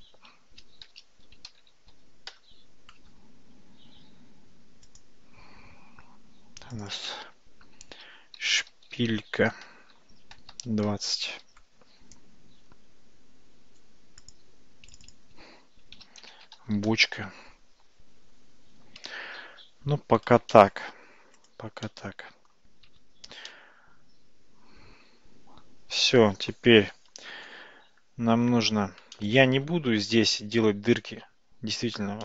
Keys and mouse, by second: 5.0 click, 6.8-12.1 drag, 14.3 click, 15.1-18.1 drag, 20.6 shift+middle click, 21.4 click, 21.9-22.5 middle drag, 23.1 alt+z, 23.5-28.1 middle drag, 29.2-29.7 shift+middle drag.